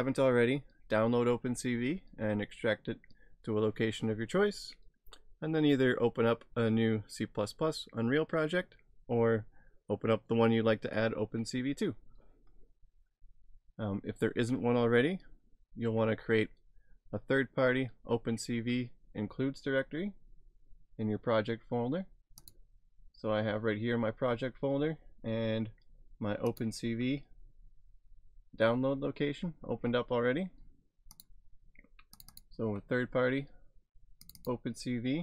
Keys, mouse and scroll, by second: 15.5-16.7 scroll down 1, 22.5 click, 26.5 click, 31.2 click, 32.3 double click, 34.2 click, 34.4 double click.